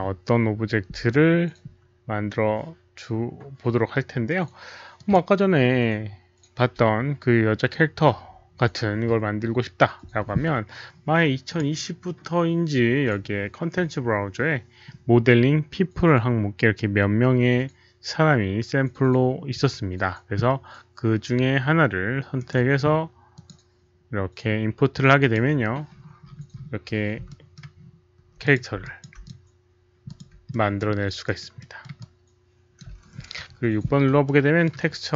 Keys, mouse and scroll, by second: 1.5 ctrl+n, 1.5 alt+right click, 1.5 alt+click, 4.9 click, 7.3 click, 11.4 click, 15.7 click, 22.3 right click, 23.3 click, 25.1 click, 25.1 right click, 25.8-26.8 scroll down 1, 27.2-27.5 alt+middle drag, 27.5 click, 27.5 right click, 27.7-28.0 alt+scroll up 1, 28.4 click, 28.8 alt+click, 29.2 click, 30.0 alt+click, 30.0 right click, 30.4-30.7 alt+middle drag, 31.2 alt+right click, 31.3 alt+click, 31.5 alt+middle drag, 31.9-32.7 alt+drag, 33.3 6, 34.2-34.6 alt+middle drag, 34.8 alt+right click, 34.8 alt+click, 34.8 6.